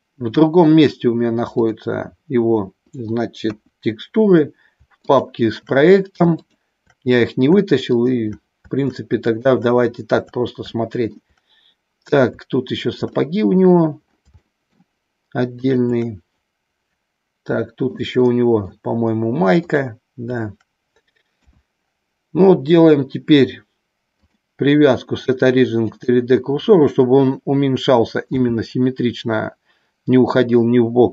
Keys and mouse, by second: 3.4 KP_1, 9.2 shift+click, 10.6 shift+middle click, 13.1 middle click, 14.4 shift+middle click, 15.5 shift+click, 17.5 middle click, 18.1 shift+middle click, 21.4 KP_1, 24.4-26.2 drag, 28.4 s.